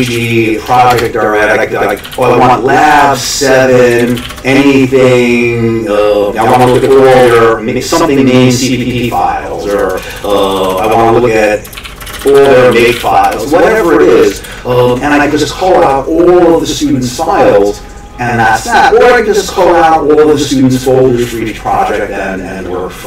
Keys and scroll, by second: 0.0-4.7 typing, 6.2-7.8 typing, 9.5-15.1 typing.